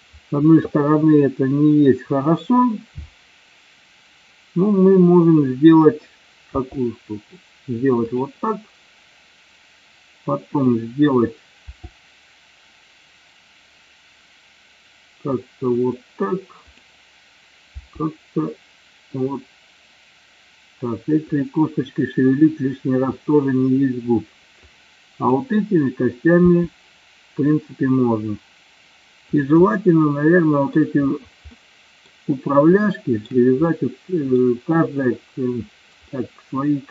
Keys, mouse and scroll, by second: 6.6 r, 11.7 r, 15.8 click, 16.7-17.3 drag, 17.8 r, 24.7 click, 26.5 r, 29.5 click, 29.7-30.9 middle drag, 31.6-32.2 middle drag, 32.9-33.3 shift+middle drag, 33.7-34.5 middle drag, 36.2-36.9 middle drag.